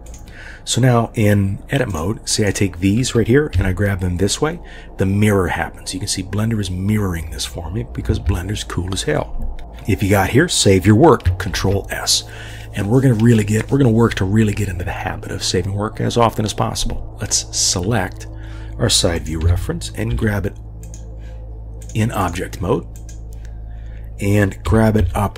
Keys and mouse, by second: 1.9 click, 2.3 click, 3.5 g, 11.6 ctrl+s, 19.2 click, 19.4 g, 20.1 y, 20.8 click, 21.9-22.3 drag, 24.6 g.